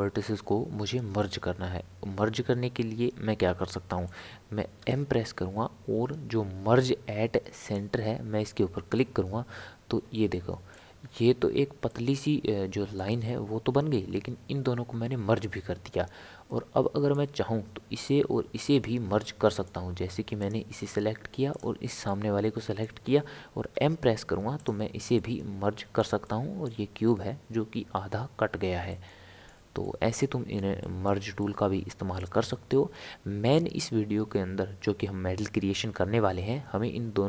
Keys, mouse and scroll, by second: 4.8 m, 8.9-16.9 middle drag, 18.7-20.4 middle drag, 20.4 click, 21.5 shift+click, 22.0-23.7 middle drag, 23.7 m, 25.1-34.6 middle drag.